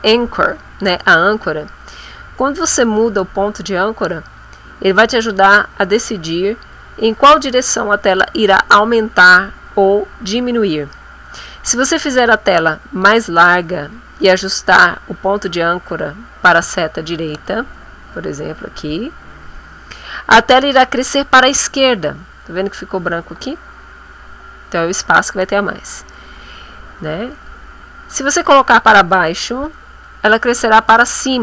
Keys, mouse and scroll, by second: 17.3 click, 27.3 click, 29.3 click.